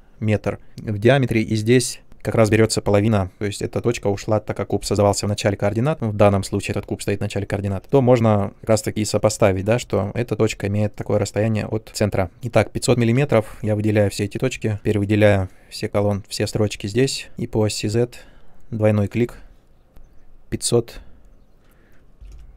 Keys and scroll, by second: 19.9 0, 22.1 m, 22.3 m.